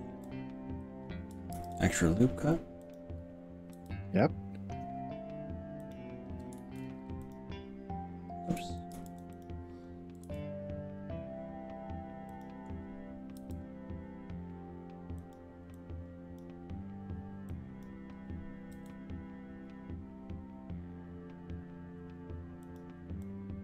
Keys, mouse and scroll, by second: 1.5 ctrl+r, 3.8 g, 5.8 click, 6.6 ctrl+z, 7.3 click, 8.9 ctrl+r, 10.3 s, 12.3 click, 13.5 g, 15.3 click, 15.8 click, 17.5-17.9 drag, 18.9 g, 22.7 drag, 23.3 click.